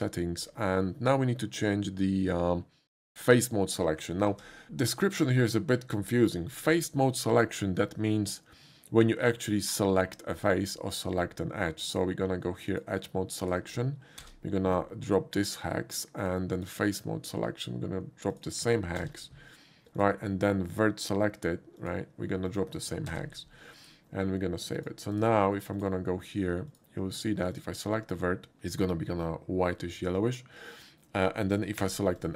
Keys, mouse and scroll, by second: 0.4 middle click, 0.7 middle click, 0.7 scroll up 1, 3.1 click, 4.3 ctrl+c, 12.7 click, 13.4 click, 14.2 ctrl+v, 16.2 click, 16.5 click, 16.9 click, 18.3 click, 19.0 ctrl+v, 20.0 click, 21.8 click, 22.5 click, 23.1 ctrl+v, 23.8 click, 24.8 click, 25.2 click, 25.7 click, 26.7 click, 27.5 click, 29.5 middle click, 31.2 middle click, 31.8 2, 32.2 click.